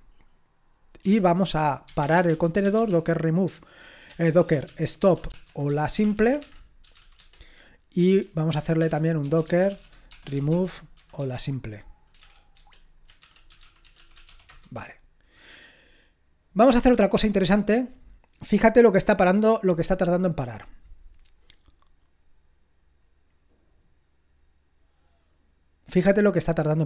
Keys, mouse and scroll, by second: 1.0-6.9 typing, 7.2 Tab, 8.2-14.7 typing.